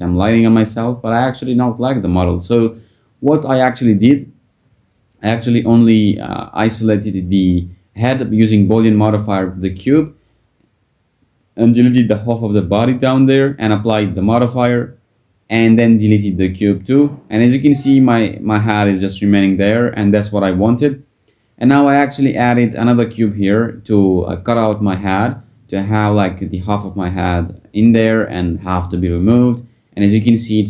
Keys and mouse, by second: 0.7 click, 8.2-9.3 drag, 10.3 click, 13.5-16.0 drag, 16.3 click, 17.0 x, 22.9-23.9 drag, 25.3 click, 25.9 click, 28.0 click, 29.3 click, 30.1 x.